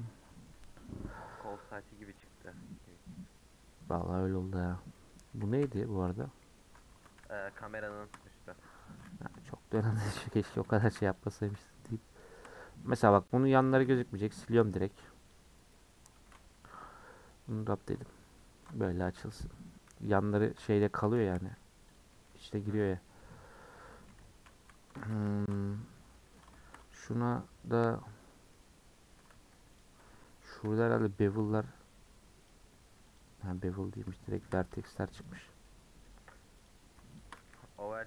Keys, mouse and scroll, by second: 0.3-4.7 middle drag, 4.7 scroll down 3, 4.9 middle click, 5.6 /, 6.0 /, 6.3 scroll down 1, 6.4 scroll up 1, 6.6 middle click, 6.9 Tab, 7.2 h, 7.5 scroll down 1, 7.5-8.8 middle drag, 8.8 click, 9.0 middle drag, 9.3 scroll up 3, 9.5-9.9 shift+middle drag, 9.9 Tab, 10.1 middle click, 10.3 scroll up 3, 10.8 alt+z, 11.4 click, 12.2 shift+click, 14.1 x, 14.5 middle click, 15.3 click, 16.1 a, 17.5 u, 18.2-19.2 scroll down 5, 19.2 /, 19.7 /, 20.8 Tab, 21.2 h, 21.9 click, 22.1 middle click, 22.7 Tab, 22.9 scroll up 3, 23.0-24.7 middle drag, 24.7 z, 25.3 shift+middle click, 25.5 scroll up 2, 25.7-26.7 middle drag, 26.7-27.3 scroll up 2, 27.3-29.3 middle drag, 29.3 1, 29.8 Left, 30.5 KP_Decimal, 30.9-32.5 middle drag, 32.5 click, 33.2 click, 33.5 middle click, 34.4 shift+click, 35.4 x, 35.6-36.7 middle drag, 36.7 click, 37.2 shift+click, 37.8 x.